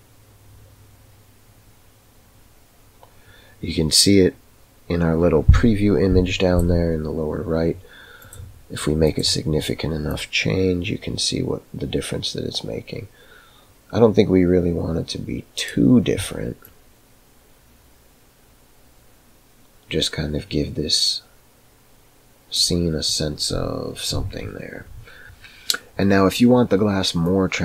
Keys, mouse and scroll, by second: 8.2 click, 9.0 click, 27.4-27.6 drag.